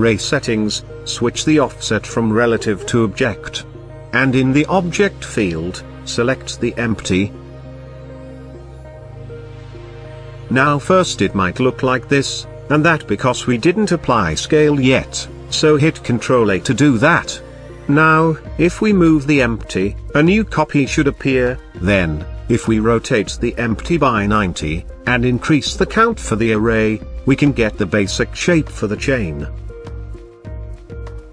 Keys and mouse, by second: 2.0 click, 3.8 click, 4.8 click, 5.8-7.7 drag, 15.4 ctrl+a, 18.1 click, 19.4 g, 19.6 x, 21.2 click, 21.9 middle click, 23.1 r, 23.4 x, 24.3 KP_9, 24.4 KP_0, 24.7 click, 29.1 click, 29.5 click, 29.9 click, 30.2 click.